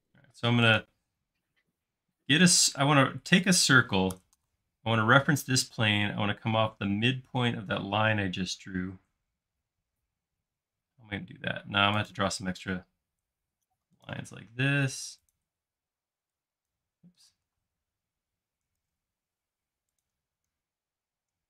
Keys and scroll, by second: 4.2 Escape, 10.2 i, 14.5 i, 17.3 Escape, 18.8 super+z.